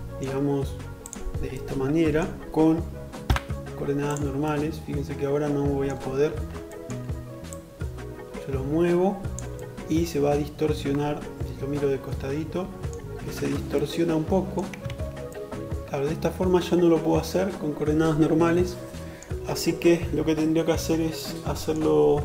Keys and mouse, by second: 5.2 alt+z, 13.8 ctrl+z.